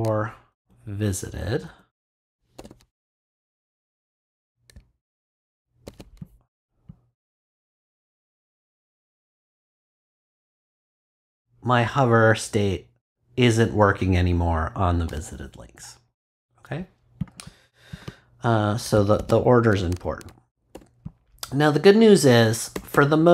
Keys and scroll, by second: 0.5 Up, 2.3 super+Up, 2.5 super+v, 3.5 super+Return, 5.8 super+s, 19.1 super+x, 20.1 super+BackSpace, 20.7 BackSpace, 22.7 Return.